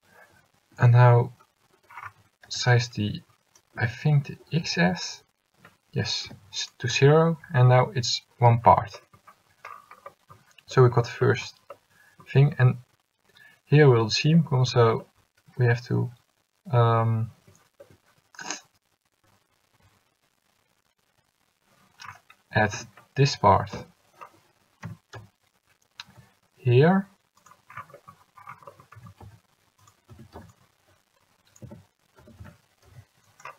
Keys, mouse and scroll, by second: 2.9 c, 4.6 s, 7.8 a, 8.6 l, 22.9 a, 23.9 l, 25.0 g, 29.1 g, 30.2 a, 30.7 c, 32.3 s.